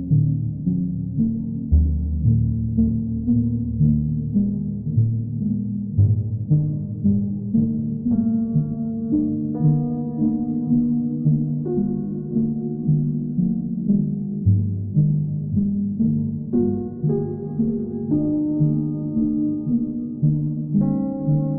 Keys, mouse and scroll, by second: 0.4 click, 5.5 click, 5.8 click, 8.0 click, 9.3 right click, 9.8 alt+right click, 10.3 alt+right click, 10.7 alt+right click, 11.2 shift+right click, 11.8 alt+right click, 12.5 right click, 14.5 click, 15.4 alt+right click, 16.8 w.